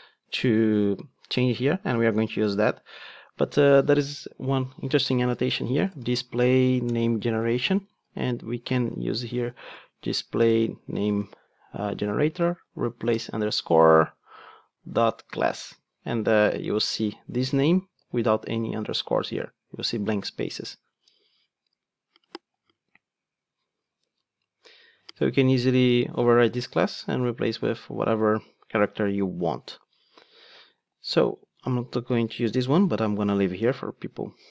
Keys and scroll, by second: 6.9 Return, 11.9 Return, 17.9 ctrl+d, 31.5 super+x, 32.1 super+z, 33.5 super+/.